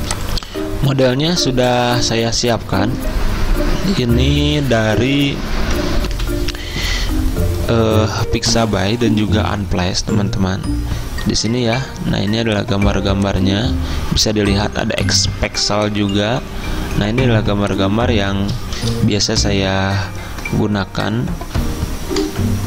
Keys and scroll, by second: 6.1 F10, 6.2 F10.